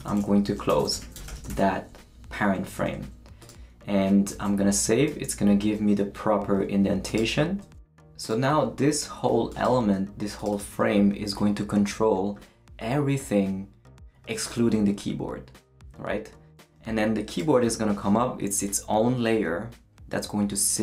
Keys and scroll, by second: 0.0-2.5 typing, 4.3 super+s.